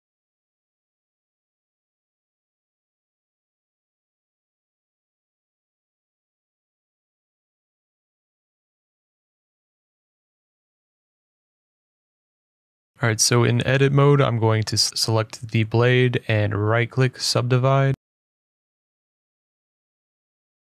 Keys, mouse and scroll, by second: 0.9 Tab, 0.9 scroll, 1.9 scroll, 1.9 g, 1.9 click, 2.3 click, 3.1 click, 5.2-5.8 scroll, 5.9 Tab, 6.6 click, 7.4 shift+click, 8.1 s, 12.4 click, 12.9 middle click, 12.9 right click, 13.1 Tab, 13.6 Escape, 14.2 Tab, 14.4 Tab, 15.5 right click, 16.7 click, 17.3 middle click, 17.5 right click, 18.2 click, 18.8 right click, 19.3 click, 19.9 right click, 20.5 click.